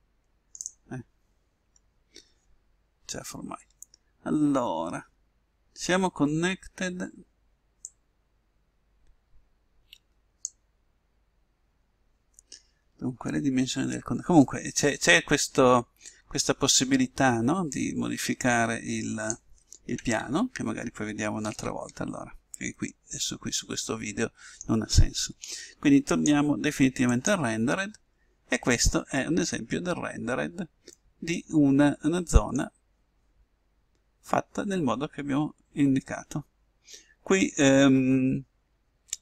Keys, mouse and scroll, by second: 1.3 scroll down 1, 1.6-3.4 scroll up 1, 7.9-9.6 drag, 17.6-19.5 drag, 20.2 ctrl+z, 21.4 ctrl+z, 22.9 middle click, 23.6 middle click, 26.0-27.9 drag, 31.2-33.2 middle drag.